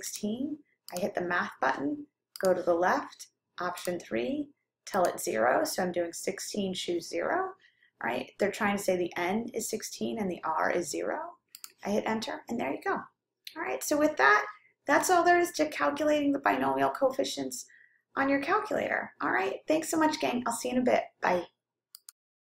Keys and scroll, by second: 0.4 6, 2.4 Left, 3.9 3, 5.3 0, 11.7 Return.